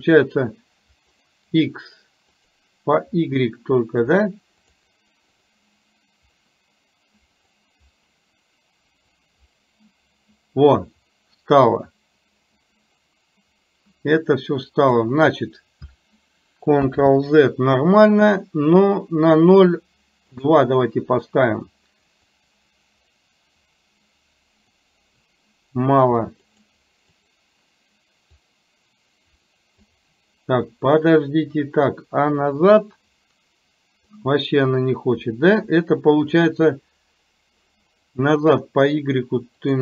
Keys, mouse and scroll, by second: 1.2 click, 2.5 click, 4.7 click, 5.5 click, 7.5 click, 9.3-15.2 drag, 20.5 click, 22.5-24.8 drag, 26.5 click, 27.2 click, 28.6-30.0 drag, 32.8-34.2 drag, 39.6 click.